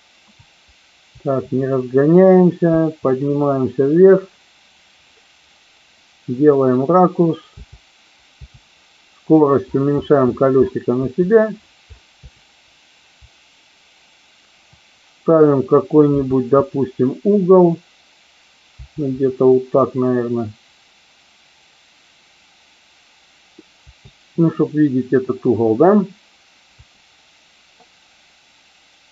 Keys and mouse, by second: 1.1 Up, 2.6 Up, 7.4 Down, 8.3 Up, 10.9 Up, 12.2 Up, 16.1 Left, 16.6 Left, 18.7 Down, 23.7 Down, 26.7 Right.